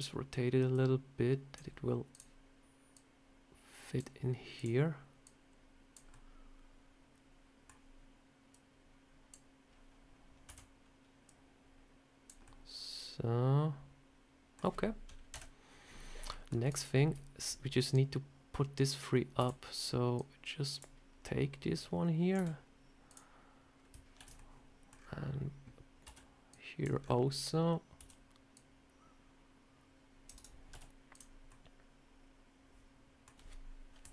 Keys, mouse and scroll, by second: 0.6 click, 2.0 click, 2.8 click, 4.4 click, 5.1 click, 6.0 middle click, 8.4 click, 10.4 a, 11.2 click, 12.3 middle click, 15.2 KP_1, 16.2 shift+middle click, 16.6 click, 16.8 scroll up 2, 19.3 scroll up 1, 19.3 b, 22.3 r, 24.1 ctrl+z, 24.2 middle click, 24.8 scroll down 3, 25.9 c, 27.9 c, 30.6 z, 31.4 middle click, 33.9 KP_7.